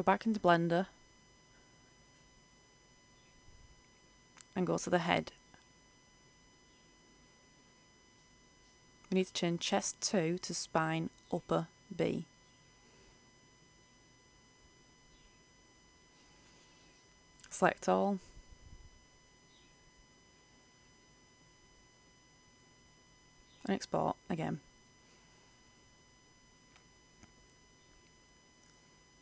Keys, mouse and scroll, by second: 1.0-1.7 scroll up 1, 1.7-2.7 right drag, 4.8-10.1 scroll up 1, 10.1 click, 11.3 s, 11.4 p, 11.6 i, 14.0 b, 14.7 Return, 16.4 right click, 17.3 Tab, 20.3 Tab, 20.8 a, 20.9 a, 21.9 click, 25.0 Return, 27.9 click.